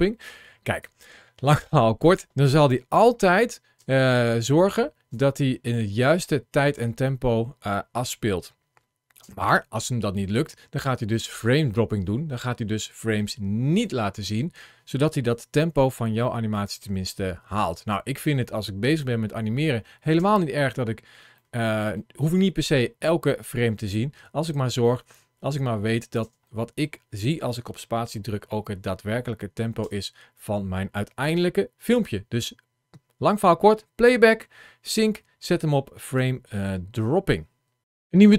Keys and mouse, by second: 0.1 click, 3.6 space, 4.9 space, 6.2 middle click, 6.6 space, 9.0 space, 16.3 click, 16.6 space, 20.0 space, 21.2 middle click, 22.5-26.0 drag, 26.0 space, 29.6 space, 30.2 click, 31.6-36.6 drag.